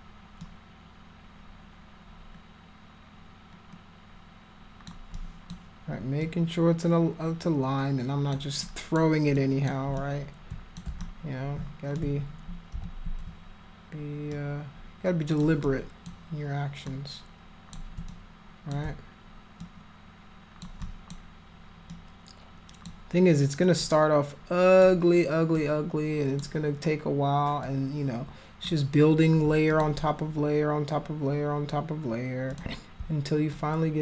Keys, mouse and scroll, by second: 0.4-4.8 alt+drag, 5.1 alt+click, 6.2-8.3 alt+drag, 8.6 alt+click, 9.3 alt+click, 9.9 click, 11.0 alt+click, 12.7 f, 14.3-15.4 alt+drag, 15.6 alt+click, 16.8 alt+click, 18.1 click, 19.6-20.6 alt+drag, 20.8 alt+click, 21.9 alt+click, 23.8-24.8 alt+drag, 25.5 alt+click, 27.6-28.6 alt+drag, 29.7 click, 32.5 click, 33.5 alt+click.